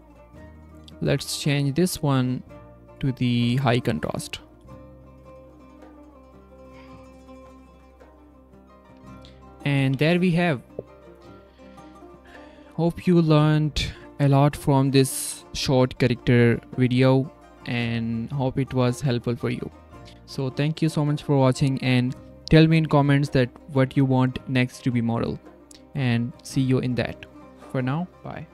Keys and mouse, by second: 1.4 click, 2.2-4.3 drag, 6.8-7.5 drag, 8.0 click, 8.8 z, 10.1 F12, 20.2 click, 21.7-23.3 typing, 22.8 click, 24.3-25.4 drag, 25.6 click, 26.4-27.2 drag, 27.2 z, 27.4 F12.